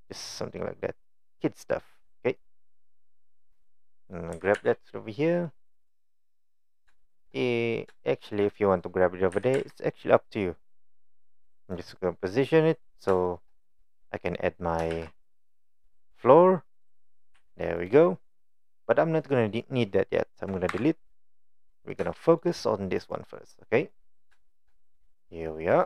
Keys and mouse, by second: 2.4 click, 3.4 click, 4.3 g, 8.1 shift+middle drag, 9.4 g, 11.6 click, 12.4-12.9 middle drag, 13.3 shift+middle click, 14.9 shift+a, 17.4 s, 20.8 Delete, 22.2 shift+middle drag, 23.1 click, 23.9 middle click, 24.5 shift+middle drag, 25.1-25.8 drag.